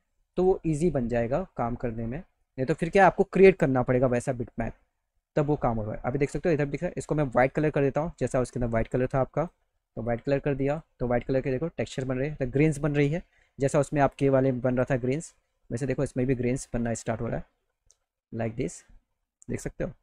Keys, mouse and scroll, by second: 0.4 click, 2.5 click, 7.5 click, 9.1 click, 10.7 click, 12.7 click, 14.8 click, 17.0 click, 19.6 middle click.